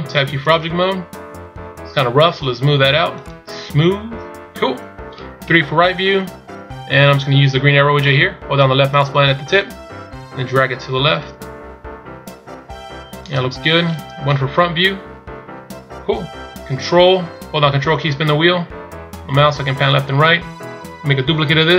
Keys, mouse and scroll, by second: 1.1-2.0 scroll up 2, 3.3 click, 5.6 KP_3, 14.4 KP_1, 18.2-21.0 ctrl+scroll down 5.